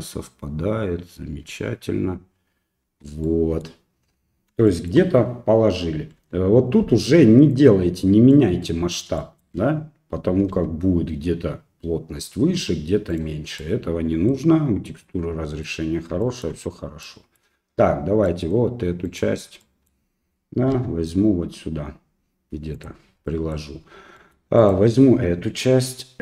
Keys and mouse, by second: 1.5 Tab, 2.9 Tab, 3.3 middle click, 4.8 shift+middle click, 6.2 g, 8.4 middle click, 9.2 shift+middle click, 10.5 s, 13.6 middle click, 15.1 middle click, 16.2 shift+middle click, 17.0 middle click, 18.3 middle click, 19.1 right click, 19.6 middle click, 20.7 g, 23.3 middle click, 24.2 middle click, 24.6 right click.